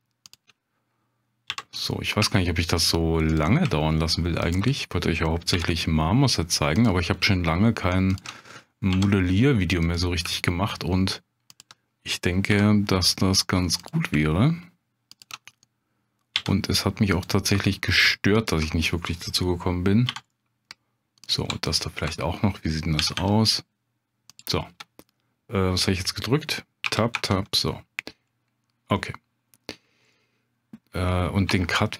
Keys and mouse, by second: 0.3 shift+click, 1.5 j, 1.9 click, 2.3 shift+click, 4.5 shift+click, 5.5 j, 6.7 click, 8.9 j, 9.9 click, 12.5 j, 13.8 click, 15.2 shift+click, 16.3 j, 17.2 click, 18.4 shift+click, 20.1 j, 20.3 click, 21.2 click, 21.7 ctrl+click, 23.0 g, 23.1 g, 24.3 click, 24.8 \, 28.1 Tab, 29.0-29.5 drag, 30.1-30.5 drag, 31.5 Tab, 31.8 click.